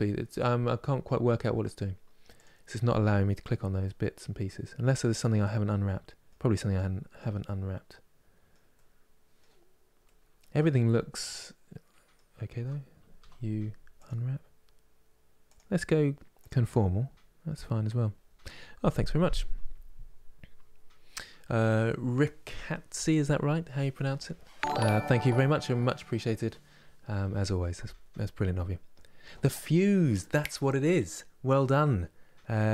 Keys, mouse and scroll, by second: 3.5-12.2 middle drag, 12.2 a, 13.7 u, 16.1-32.7 drag.